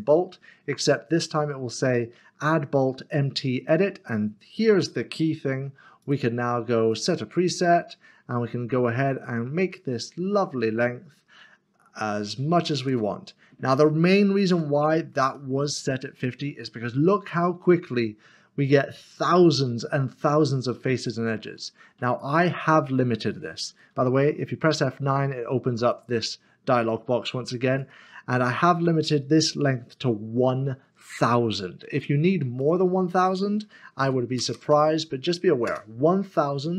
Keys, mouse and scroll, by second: 0.0 click, 6.0 click, 10.0 click, 14.8 click, 22.2 click, 24.7 F9, 25.9 click, 32.6 click, 34.4-34.7 typing, 35.6 Return.